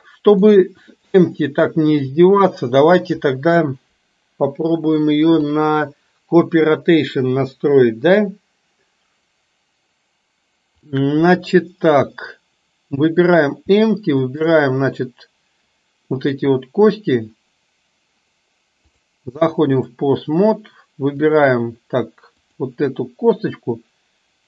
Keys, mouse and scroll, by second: 1.4-2.2 shift+middle drag, 14.3 shift+click, 18.9-20.1 drag, 21.2 click, 22.4 click.